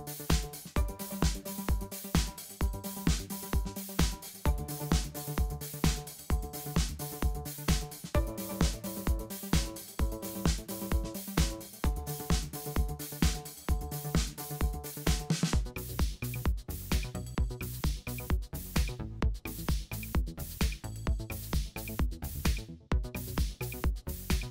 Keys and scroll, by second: 1.1 shift+super+a, 1.3 alt+super+b, 1.6 super+2, 1.8 super+0, 2.8 v, 4.1 super+c, 5.3 super+f, 5.6 i, 6.1 alt+super+b, 6.9 v, 8.1 super+c, 8.5 super+f, 14.2 super+a, 14.6 super+x, 14.9-18.4 typing, 18.6 alt+super+b, 19.0 super+2, 19.7 alt+super+b, 19.9 super+2, 20.5 alt+super+b, 20.7 super+2, 21.3 alt+super+b, 21.9 super+2.